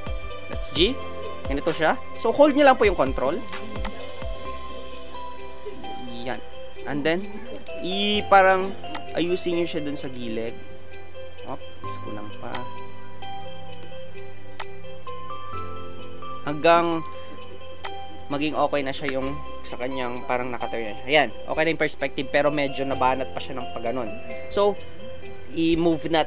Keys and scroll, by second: 18.9 Return.